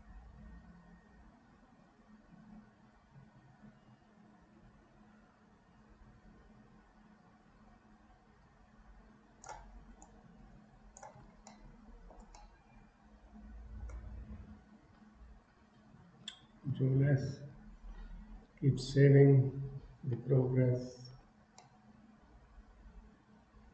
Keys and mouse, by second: 10.1 shift+click, 11.7 middle click, 12.5-13.9 middle drag, 17.5 ctrl+s, 21.7-23.7 middle drag.